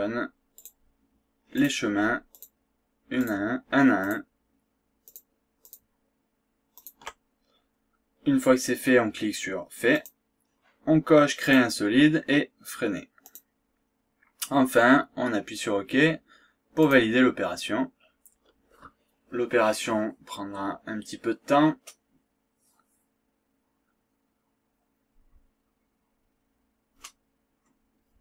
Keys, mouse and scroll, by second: 0.6 ctrl+click, 1.6 ctrl+click, 2.4 ctrl+click, 3.2 ctrl+click, 4.1 ctrl+click, 5.1 ctrl+click, 5.7 ctrl+click, 6.8 ctrl+click, 10.0 click, 11.4 click, 13.2 click, 16.8 click.